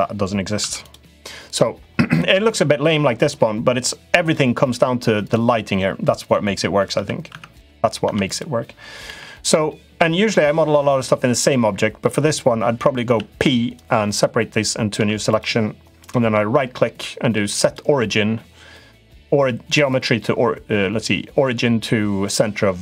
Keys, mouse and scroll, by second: 0.3 Tab, 0.6 click, 0.9 middle click, 1.9 middle click, 4.9 click, 6.7 Tab, 7.0 Tab, 7.3 click, 7.8 Tab, 8.0 click, 8.8 l, 9.8 l, 10.5 l, 12.8 p, 14.7 Tab, 15.0 click, 15.8-22.8 right drag.